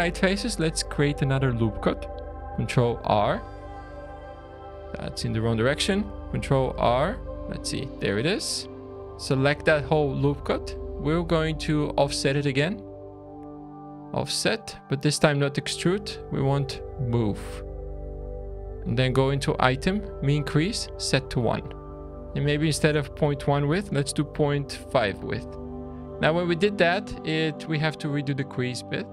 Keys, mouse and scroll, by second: 2.3 ctrl+r, 5.3 ctrl+z, 6.4 ctrl+r, 9.3 alt+click, 9.3 typing, 11.1 typing, 12.3 typing, 13.7 click, 13.8 typing, 21.5 scroll, 21.9 shift+middle click.